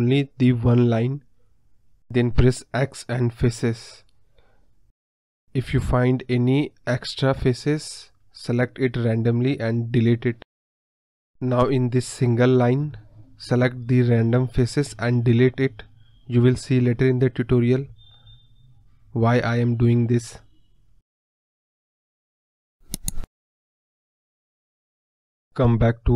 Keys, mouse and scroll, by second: 5.1 click, 6.2 shift+click, 6.6 shift+click, 7.6 click, 8.9 shift+click, 10.1 click, 10.5 shift+click, 11.1 scroll up 2, 11.1 middle click, 11.3 scroll down 2, 11.4-12.2 scroll up 1, 12.3-15.5 drag, 15.5 KP_1, 16.1 click, 18.3 click, 18.6 x, 18.8 middle click, 19.5 click, 20.0 click, 20.4-21.0 scroll down 1, 21.0-21.4 scroll down 1, 21.4 click, 22.9-23.8 scroll down 1, 23.8 scroll up 2, 24.0 scroll down 1, 24.0-24.4 scroll up 2, 24.4-25.0 scroll down 1, 25.9-26.1 scroll down 1.